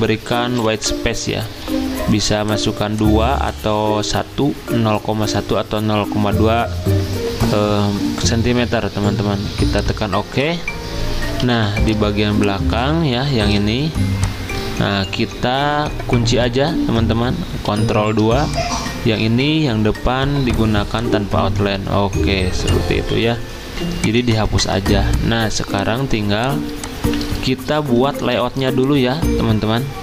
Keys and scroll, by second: 1.6 2, 11.5 z, 13.5 v, 14.7 ctrl+z, 17.7 ctrl+2, 19.0 ctrl+z, 24.8 z, 27.8 b, 28.3 v.